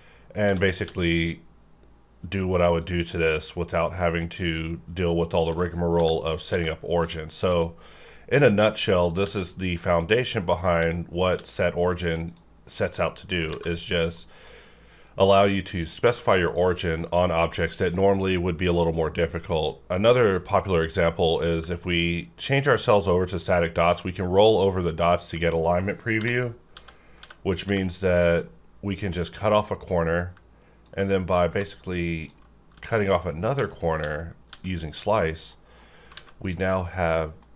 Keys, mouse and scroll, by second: 0.4 x, 0.8 x, 2.7 click, 3.6-4.5 scroll up 1, 4.5 click, 5.5 x, 5.9 x, 6.5 x, 7.5 click, 9.2 x, 11.3 x, 12.3 click, 13.1 middle click, 13.5 alt+a, 13.9 middle click, 16.5 click, 20.1 click, 21.3 middle click, 22.7-23.1 ctrl+scroll up 1, 23.9 ctrl+scroll up 1, 24.9 ctrl+click, 26.2-27.6 typing, 29.3 click, 29.6 middle click, 30.8-32.7 ctrl+drag, 32.7 x, 33.5 x, 34.0 x, 34.5 x, 35.4 click, 35.8 middle click, 36.1 alt+a, 36.4 click, 36.4 click, 37.2 middle click.